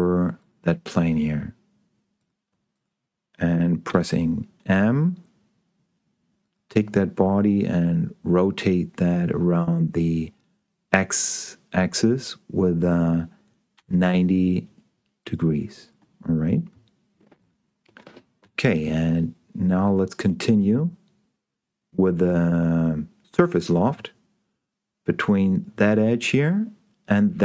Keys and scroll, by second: 4.4 m, 14.2 9.